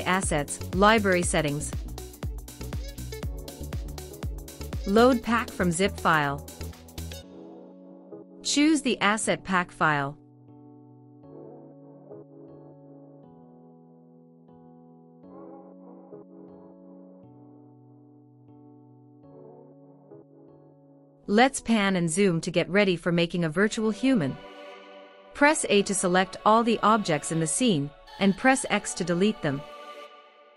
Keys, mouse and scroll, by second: 2.0 click, 16.5 click, 18.2 click, 20.2-20.7 shift+middle drag, 20.9 drag, 21.0-22.3 middle drag, 22.6-23.5 shift+middle drag, 24.6-26.0 shift+middle drag, 27.0 a, 28.0 x.